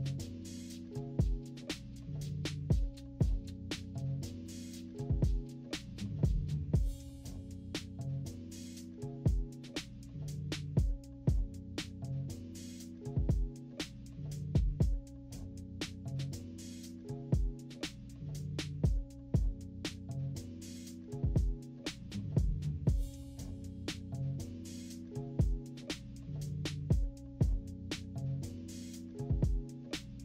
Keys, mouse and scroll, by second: 1.1-3.7 drag, 4.0 -, 4.5-4.9 scroll up 2, 4.5 =, 5.1-6.2 drag, 6.5-9.1 drag, 9.4-10.8 typing, 10.1-10.7 scroll up 6, 10.7 scroll down 2, 11.8 click, 12.2-13.7 drag, 13.9 click, 14.4-16.5 drag, 16.8-17.8 typing, 17.4-17.7 scroll down 2, 18.2-19.7 drag, 20.1 -, 20.4-21.5 scroll up 6, 20.6 =, 21.0 =, 21.1 =, 21.7 click, 21.8 click, 22.2 click, 22.5 click, 23.3 click, 23.7 click, 23.9-25.2 drag, 25.5 -, 26.2 scroll down 2, 26.5 -, 26.7 =, 26.9-27.7 scroll up 6, 27.2 =, 28.3 click, 28.4 click, 28.6 click, 29.0 click, 29.6 click, 29.9-30.2 drag.